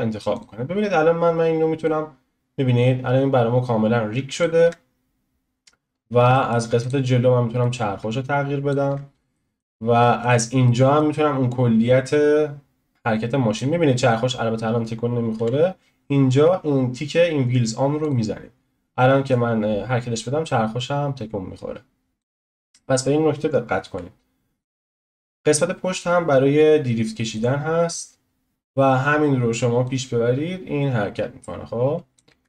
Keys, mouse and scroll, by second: 4.6 ctrl+z, 5.9-6.3 scroll down 1, 6.3-6.8 shift+middle drag, 6.8 click, 7.6 click, 8.9 ctrl+z, 9.3-10.2 middle drag, 10.2 click, 10.6-12.1 shift+middle drag, 12.1-15.1 drag, 15.3 n, 15.4 n, 18.0-19.4 drag, 23.9 n, 24.6 click, 25.2 click, 25.6-26.3 middle drag, 26.3-27.3 scroll down 1, 27.3 click, 29.8 click, 32.3 ctrl+z.